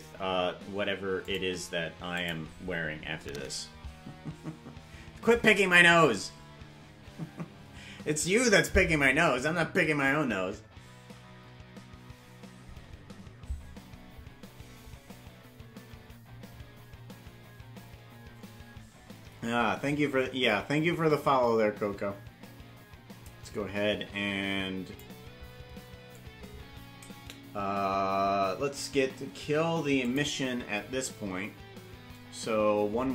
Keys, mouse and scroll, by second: 20.5-25.0 drag, 30.0-33.1 drag.